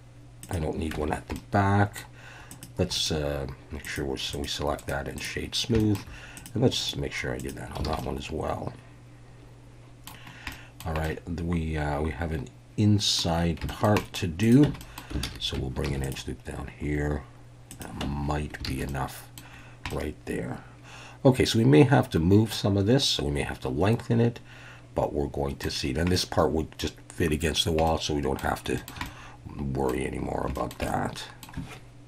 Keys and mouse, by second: 0.4 click, 0.9 Tab, 1.3-2.0 middle drag, 3.1-3.9 right drag, 4.3 click, 4.8 right click, 5.8 shift+middle click, 6.9-7.5 right drag, 7.9 alt+a, 8.0-10.1 middle drag, 10.5-10.8 middle drag, 11.0-13.2 middle drag, 13.7 shift+middle drag, 14.0 middle click, 14.6 Tab, 14.8 click, 15.2 alt+a, 15.9 ctrl+r, 17.7 click, 18.0 Tab, 18.6 alt+a, 18.9-19.4 middle drag, 19.9-25.6 middle drag, 26.1-26.8 middle drag, 27.8-28.4 middle drag, 28.8 shift+middle click, 29.1-29.9 middle drag, 30.6 shift+middle click, 30.9-31.4 middle drag.